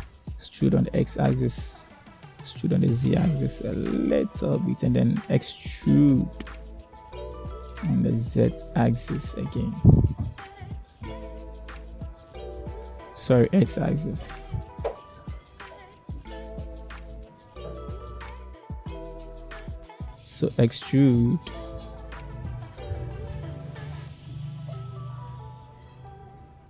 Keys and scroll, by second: 1.4 e, 6.0 1, 9.4 e, 11.9 x, 16.1 Tab, 19.3 Tab, 21.7 e.